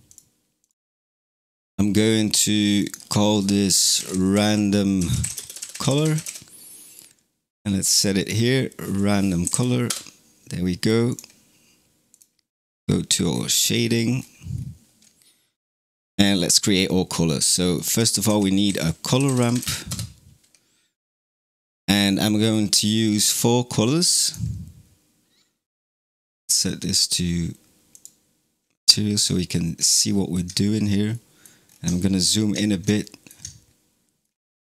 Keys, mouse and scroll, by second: 2.6 click, 2.7-5.8 drag, 8.0-9.4 drag, 11.0 click, 12.0 click, 13.2 scroll down 5, 13.5-14.0 middle drag, 14.0-14.5 scroll up 7, 15.4-18.1 middle drag, 18.1 shift+a, 21.4-22.0 scroll up 3, 22.0-23.5 middle drag, 23.5 drag, 26.8 click, 27.8 click, 28.8 shift+middle click, 29.2 scroll up 3, 29.7-31.5 shift+middle drag, 31.5-31.9 scroll up 5, 31.9 shift+middle click, 32.5-32.9 scroll up 2, 32.9-33.5 shift+middle drag, 33.5-34.1 scroll down 1, 34.1-34.6 middle drag, 34.6-34.7 scroll up 4.